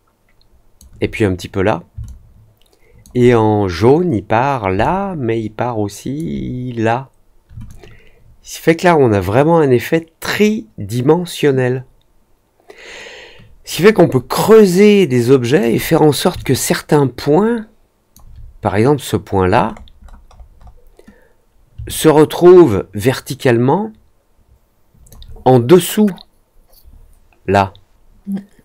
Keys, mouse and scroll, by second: 2.0-3.0 alt+drag, 4.7-6.1 alt+drag, 7.6-15.5 alt+drag, 16.3-18.1 alt+drag, 19.6 middle click, 19.9-20.7 scroll up 3, 21.8-24.3 alt+drag, 24.4 alt+click.